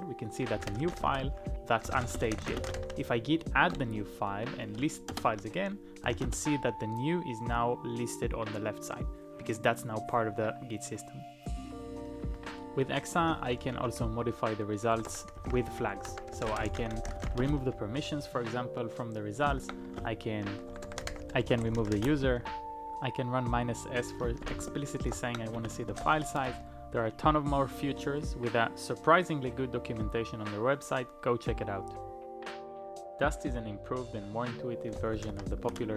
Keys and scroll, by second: 0.3-6.5 typing, 10.9-13.3 typing, 14.7-17.9 typing, 19.5 ctrl+p, 20.0-22.5 typing, 24.1 typing, 24.5 ctrl+a, 25.1 ctrl+p, 25.5-26.0 typing, 26.4 Return, 34.7-35.8 typing.